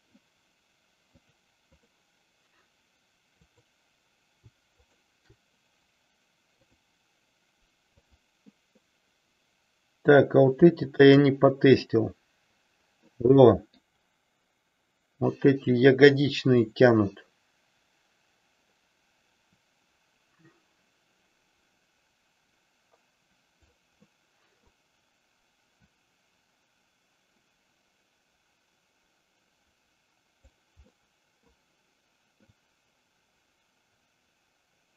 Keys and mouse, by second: 1.3 click, 3.4 click, 4.7 shift+click, 6.7-8.2 drag, 13.1 middle click, 16.2-23.7 drag, 24.1 middle click, 26.0-30.5 drag, 31.1 middle click, 32.5-34.9 drag.